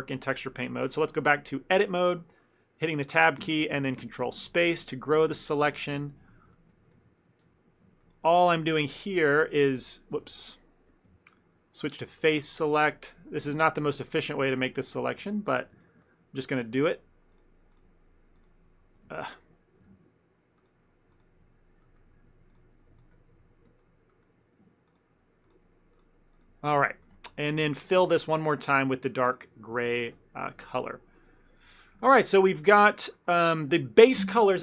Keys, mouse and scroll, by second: 0.1 Tab, 6.6 middle click, 7.0 ctrl+middle click, 8.6 shift+middle click, 10.3 ctrl+z, 11.5 3, 13.7 ctrl+z, 15.9 shift+middle click, 19.2 ctrl+alt+shift+z, 19.5 ctrl+alt+shift+z, 21.9 middle click, 23.0 shift+middle click, 23.7 middle click, 26.8 ctrl+middle click, 28.0 alt+shift+Tab, 29.3 click, 29.9 shift+middle click, 30.6 a, 30.7 a, 31.4 a, 31.9 shift+middle click, 32.1 ctrl+middle click, 32.3 middle click, 33.2 shift+middle click, 33.5 ctrl+middle click.